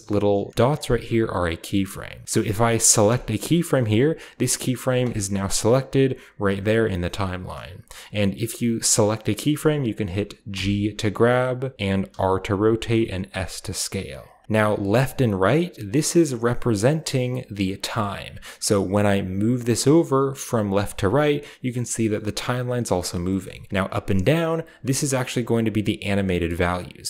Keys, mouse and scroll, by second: 2.3 typing, 2.9 click, 3.6 typing, 4.9 click, 10.3 g, 11.7 middle click, 11.9 r, 13.2 s, 14.5-16.7 drag, 17.5 click, 18.8-20.9 drag, 22.3-25.6 drag, 23.6 middle drag, 26.0 click.